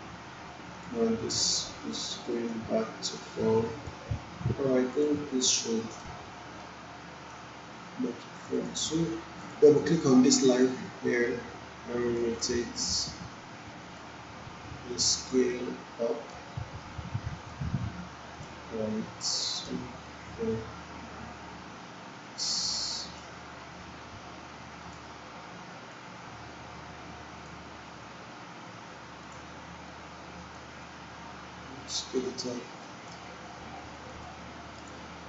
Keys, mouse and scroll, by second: 6.0-7.6 right drag, 8.4-14.3 drag.